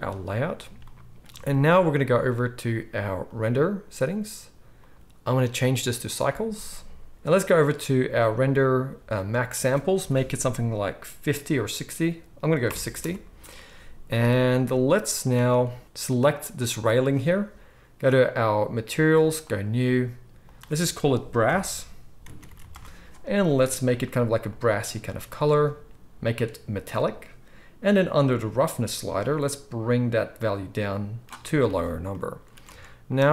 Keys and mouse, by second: 0.0-3.2 middle drag, 3.2 click, 3.4-4.7 middle drag, 4.7-16.2 drag, 16.2-19.5 middle drag, 19.5-24.1 drag, 22.6 s, 24.1-26.5 middle drag, 26.5-33.3 drag, 32.7 alt+a.